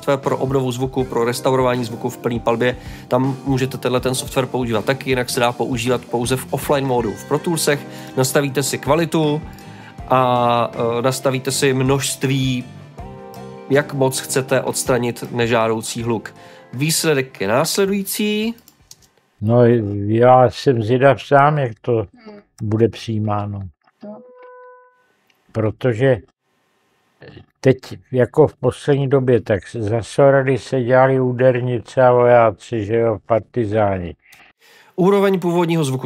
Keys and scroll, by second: 18.8 space.